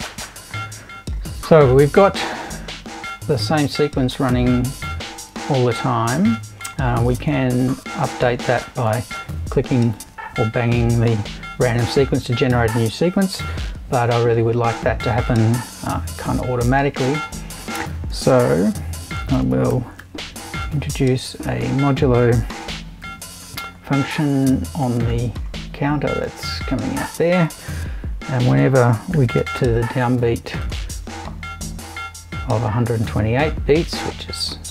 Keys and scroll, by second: 15.8 super+i, 18.4 shift+7, 19.3 shift+space, 19.7 2, 20.0 8, 22.2 BackSpace, 23.0 shift+5, 27.7 super+i, 28.9-29.7 typing.